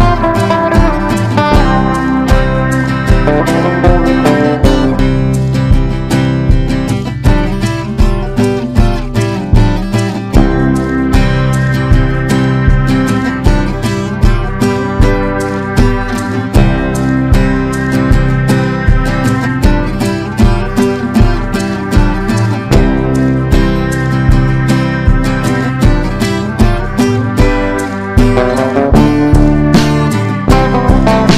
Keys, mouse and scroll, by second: 0.1-8.5 drag, 10.9 shift+click, 12.4-20.3 drag, 22.3 F4, 23.1 click, 26.0 F4, 27.1 click, 28.4 right click, 29.3-31.3 drag.